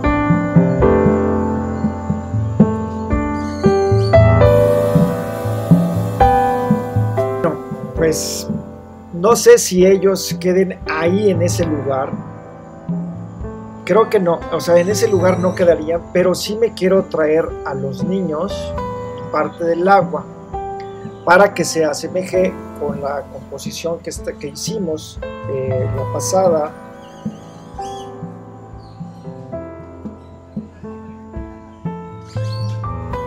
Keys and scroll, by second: 5.5 Return.